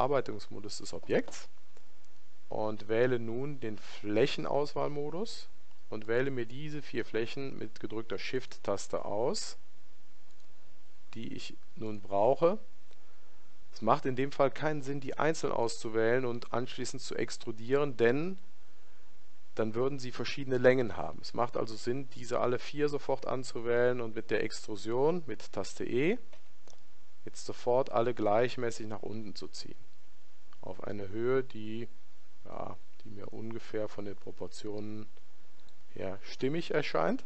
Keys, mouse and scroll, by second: 4.2 click, 6.1-37.2 right drag.